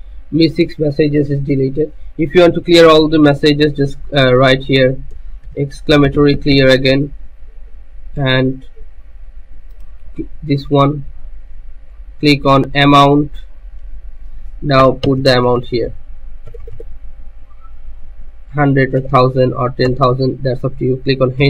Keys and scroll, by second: 5.4-7.7 typing, 15.0 0, 16.4 BackSpace, 19.2 0, 19.9 0, 21.3 Return.